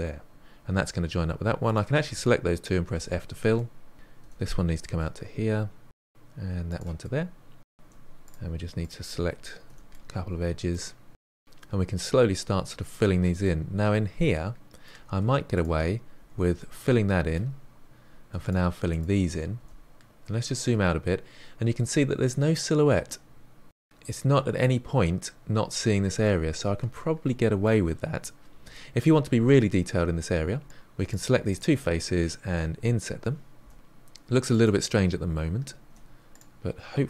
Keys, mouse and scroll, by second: 1.6 shift+click, 2.9 f, 3.5-3.9 middle drag, 3.9 click, 4.0 e, 5.2 middle click, 5.7 click, 5.8 e, 6.5-7.8 middle drag, 7.8 2, 7.9 drag, 8.2 shift+click, 8.5 f, 8.6-9.4 middle drag, 9.4 click, 9.5 f, 9.8-10.3 middle drag, 10.3 click, 10.6 shift+click, 11.0 f, 11.2-12.8 middle drag, 12.8 click, 13.4-15.5 middle drag, 15.5 shift+click, 16.1 f, 16.5-17.8 middle drag, 17.8 f, 18.2 shift+click, 18.6 shift+click, 19.1 f, 19.6-20.1 scroll down 2, 20.1-22.5 middle drag, 27.5-28.8 middle drag, 28.8-29.4 scroll up 3, 29.4-30.6 shift+middle drag, 30.6 shift+click, 30.8-34.0 typing, 30.9 shift+click, 32.6 click, 33.6 click, 33.9 click, 34.6 middle click, 35.0 click, 35.0 g, 35.7 shift+middle click, 35.8 scroll up 2, 36.0 middle click, 36.2 click, 36.4-37.0 typing.